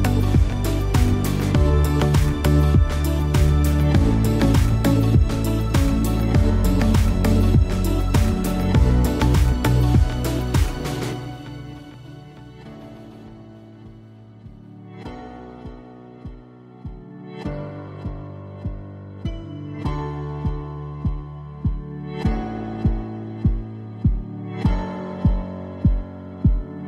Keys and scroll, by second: 21.1 alt+a, 26.1 v.